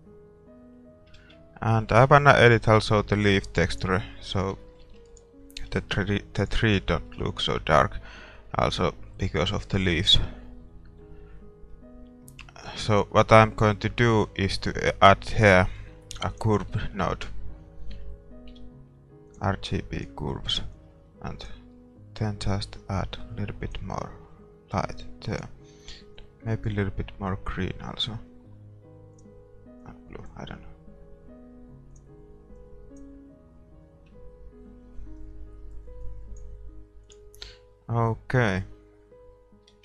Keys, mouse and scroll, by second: 1.3 shift+z, 1.5 scroll up 1, 1.7 scroll down 1, 1.9-3.7 middle drag, 3.7-6.9 drag, 4.6-6.4 middle drag, 5.2-6.9 right drag, 7.6 shift+z, 8.4 middle click, 9.0 scroll up 1, 9.2-20.0 middle drag, 20.0-22.9 drag, 23.1-25.0 drag, 25.5-28.4 drag, 29.4-31.7 drag, 32.1-34.7 drag, 35.2-37.0 drag, 37.2-38.9 drag.